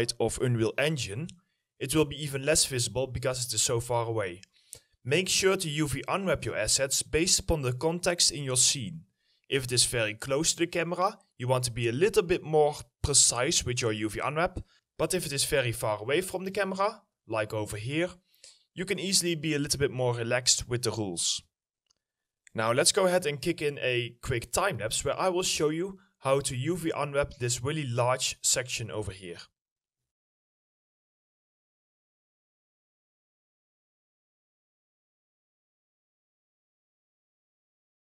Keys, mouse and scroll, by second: 0.8-1.7 typing, 0.9 right click, 3.8 right click, 3.9 s, 14.7 right click, 23.4 middle click, 23.6 scroll down 1, 24.8 alt+middle click, 25.8 scroll up 1, 26.4 alt+middle click, 30.5 middle click, 30.9 alt+middle click, 32.7 double click, 33.5-34.0 scroll down 1, 34.0 middle click, 34.0 scroll down 1, 34.3 middle click, 34.4-34.8 scroll up 1, 34.8 middle click, 35.6 scroll down 1, 35.8 middle click, 36.0 scroll up 1, 36.3 middle click, 36.6 ctrl+click, 37.0 middle click, 37.0 ctrl+click, 37.1 scroll up 1, 37.4 ctrl+click, 37.9 middle click.